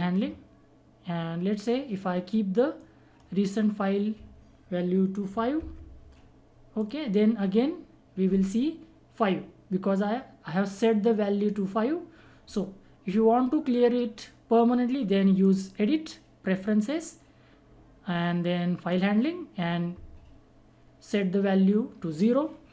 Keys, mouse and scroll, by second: 2.7-6.1 drag, 6.7 click, 8.1 click, 15.4 click, 18.8 click.